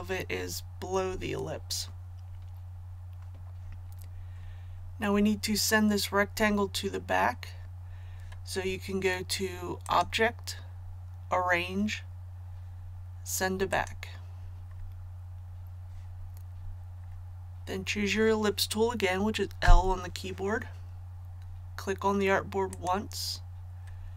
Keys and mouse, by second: 3.7 click, 19.6 l, 22.7 click.